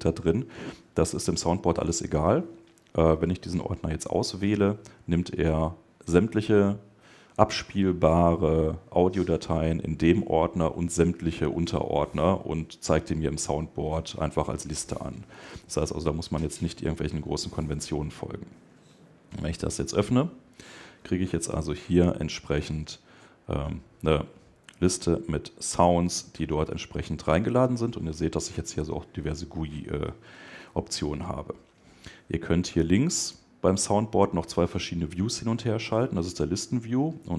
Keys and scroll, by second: 2.9 Left, 3.9 Left.